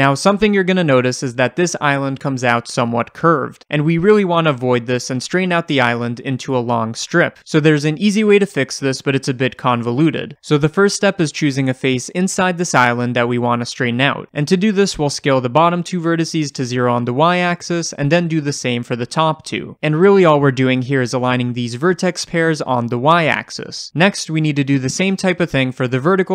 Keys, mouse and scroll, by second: 0.8 click, 1.2-15.1 shift+middle drag, 1.8-2.3 scroll up 1, 2.9 scroll up 1, 10.7-11.9 scroll up 1, 14.0 1, 14.2-15.1 scroll up 1, 15.1-15.5 drag, 16.3 s, 17.5-18.2 drag, 18.2 s, 19.0 Return, 24.5-25.5 drag, 25.5 s.